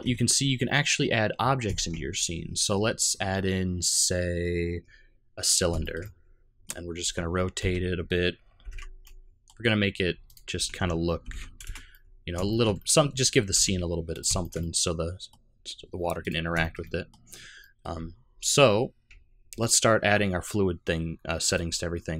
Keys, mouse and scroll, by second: 1.7 shift+a, 5.8 shift+middle click, 5.8 shift+scroll up 1, 6.0 middle click, 7.0 r, 10.5 r, 11.9 middle click, 12.5 shift+middle click, 12.7 middle click, 13.2-13.7 scroll up 2, 13.5 g, 14.4 shift+middle click, 14.6 middle click, 16.2 click, 16.6 shift+middle click, 16.8 middle click, 17.3 scroll down 1, 17.6 middle click, 18.0 z, 21.5 click.